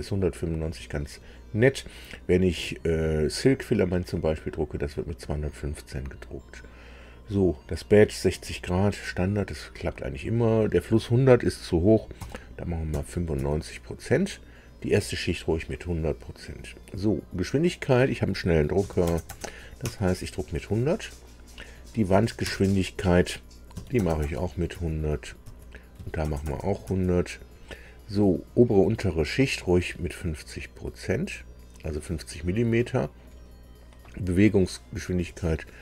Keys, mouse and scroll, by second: 10.2 click, 12.1 KP_9, 12.9 KP_5, 13.3 Tab, 17.5 click, 18.8 KP_1, 19.1 KP_0, 19.3 KP_0, 19.9 Tab, 22.4 Tab, 23.7 KP_1, 24.0 KP_0, 24.2 KP_0, 24.8 Tab, 25.5 Tab, 26.0 KP_1, 26.3 KP_0, 26.5 KP_0, 26.9 Tab, 30.8-32.1 drag, 35.0 click.